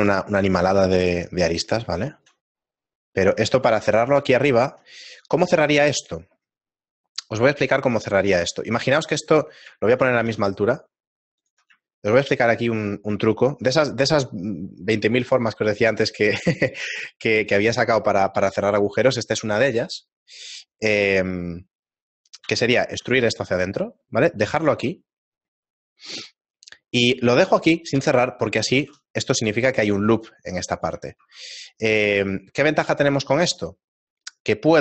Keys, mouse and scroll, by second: 1.8 shift+middle click, 1.8 s, 3.1 middle click, 4.5 shift+middle click, 9.1 middle click, 14.4 shift+middle click, 14.4-17.1 scroll up 5, 21.8 middle click, 23.3 e, 23.3 s, 25.4-27.3 scroll up 2, 28.7 shift+middle click, 28.7-30.9 scroll up 1, 30.9 ctrl+r, 30.9 right click, 31.2 ctrl+Tab, 33.3-34.8 scroll up 1.